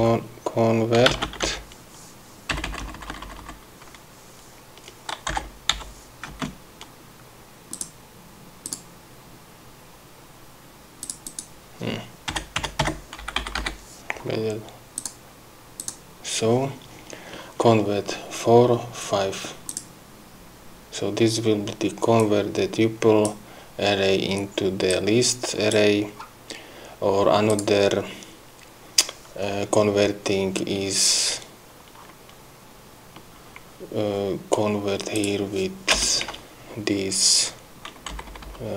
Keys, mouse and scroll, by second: 0.0-3.0 typing, 6.2 n, 6.8 space, 8.2 click, 9.1 click, 11.5 click, 12.8 -, 13.9 Delete, 15.5 click, 16.3 click, 20.2 click, 20.9 scroll down 2, 22.7-23.9 drag, 25.4 click, 26.7 scroll up 2, 27.3 scroll down 2, 27.5-28.0 scroll up 2, 28.0 click, 35.6 click, 36.5 Return, 38.6 Up.